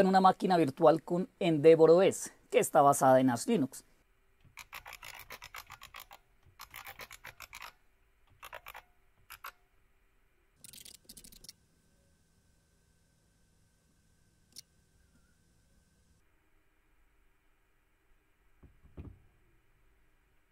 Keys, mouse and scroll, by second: 0.3-1.7 drag, 2.0 super+Return, 2.0 Tab, 2.0 typing, 3.0-11.8 typing, 14.5 Return, 16.1-20.5 scroll down 1.